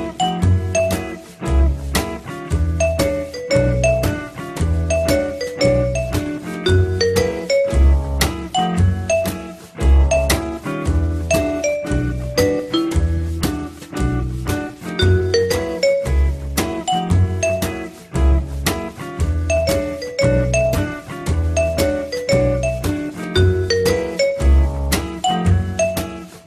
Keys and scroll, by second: 0.9 Return, 13.2 t, 18.3 f, 20.3 w.